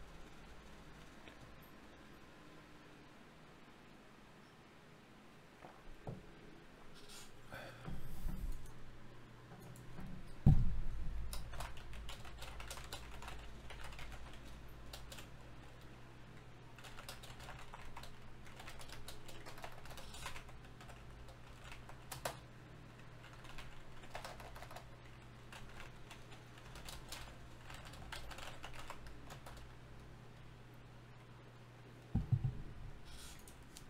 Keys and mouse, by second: 1.9-4.9 right drag, 4.9-7.8 drag, 5.7 d, 9.5 shift+q, 15.2 ctrl+z, 16.5 n, 17.3-19.2 drag, 18.0 n, 20.2 shift+q, 24.6-27.4 drag, 27.4 shift+q.